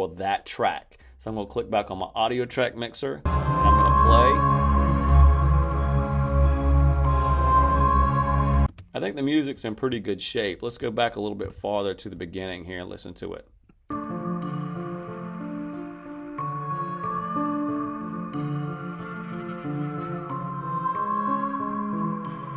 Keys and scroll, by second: 3.1 space, 8.6 space, 13.8 space.